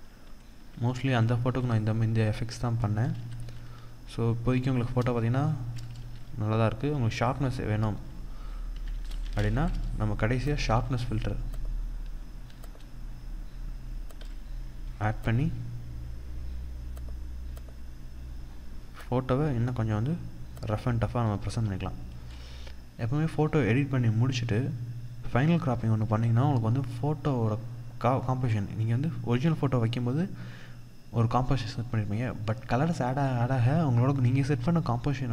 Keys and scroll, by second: 0.3 ctrl+0, 1.4 ctrl+0, 2.5 ctrl+=, 5.5 ctrl+=, 10.0 ctrl+0, 35.2 ctrl+=.